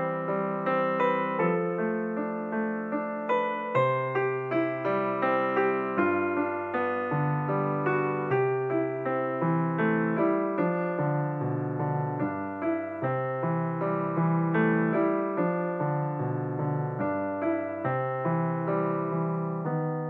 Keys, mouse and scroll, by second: 1.9 click, 2.4 ctrl+r, 9.5 click, 10.7 ctrl+r, 19.4-20.0 drag.